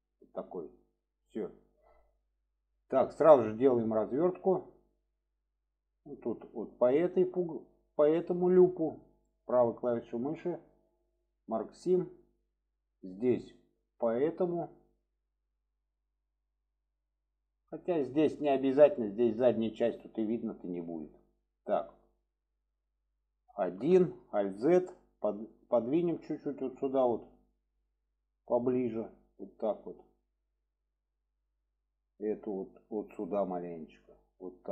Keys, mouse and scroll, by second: 2.3 drag, 3.7 middle click, 4.8 middle click, 6.3 click, 7.0 alt+shift+click, 7.9-8.4 alt+shift+drag, 9.3-11.6 right drag, 13.1 click, 14.1 alt+shift+click, 17.8 click, 18.4-18.7 middle drag, 20.2-20.9 middle drag, 21.4-22.0 alt+middle drag, 24.4 alt+z, 25.0-25.4 drag, 26.1-26.7 drag, 27.4-27.8 drag, 28.4-29.5 drag, 29.7 click, 31.6-31.9 shift+middle drag, 32.4-32.9 drag, 33.7-34.7 drag.